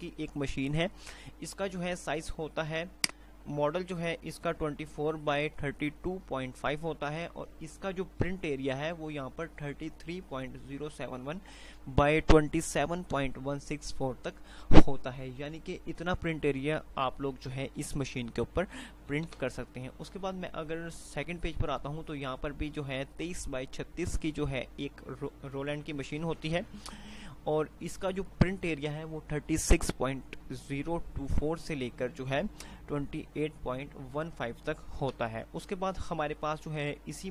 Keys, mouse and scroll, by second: 3.4 click, 3.8 typing, 19.8 Page_Down, 19.8 typing, 21.8 typing, 35.3 Page_Down, 35.3 typing, 37.1 typing.